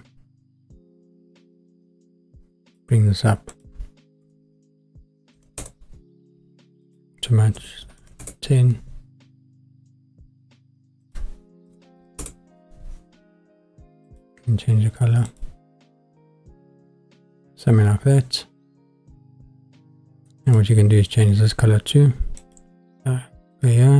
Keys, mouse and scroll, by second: 2.7 click, 3.5-5.7 drag, 6.8-8.3 drag, 11.0-12.2 drag, 14.1 click, 20.4 click, 22.4-23.6 drag.